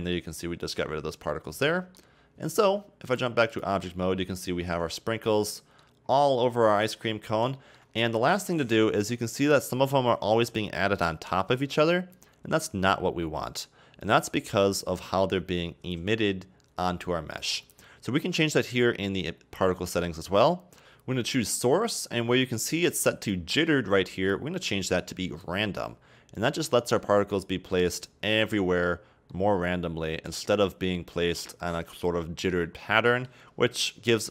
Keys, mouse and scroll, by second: 0.0-0.6 middle drag, 0.6 scroll down 2, 0.8-1.4 middle drag, 1.4-1.8 scroll down 1, 1.8-3.1 middle drag, 3.1-4.1 drag, 4.1-4.6 scroll up 2, 4.6 a, 4.7 a, 5.0-6.1 middle drag, 6.1 scroll down 2, 6.3-7.1 middle drag, 7.1-7.6 scroll up 2, 7.6 shift+middle drag, 7.9-8.6 scroll up 2, 8.6-9.7 scroll up 1, 9.7-12.8 scroll up 2, 13.7-15.0 scroll down 1, 15.0-16.6 scroll down 1, 20.8-22.8 drag, 24.2-26.3 drag, 26.3-27.3 scroll down 5, 27.3-32.3 middle drag, 32.7 scroll down 1, 32.8-33.3 middle drag, 33.3-33.8 scroll up 2, 33.8-34.3 middle drag.